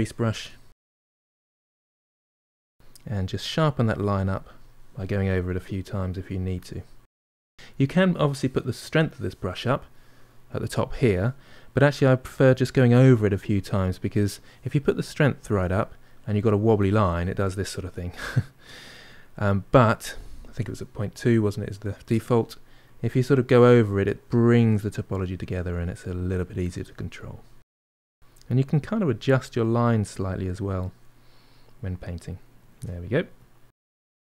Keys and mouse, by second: 0.7 click, 0.7 f, 1.0 middle click, 1.6 click, 2.0 middle click, 2.1 click, 2.8 middle click, 3.2 click, 4.1 middle click, 4.9-7.5 drag, 7.5-10.5 middle drag, 11.3 middle click, 12.0-18.0 drag, 18.0 ctrl+z, 20.1-25.7 drag, 25.7 middle click, 26.2 shift+click, 26.8 middle click, 27.2-30.8 shift+drag, 30.8-34.3 middle drag.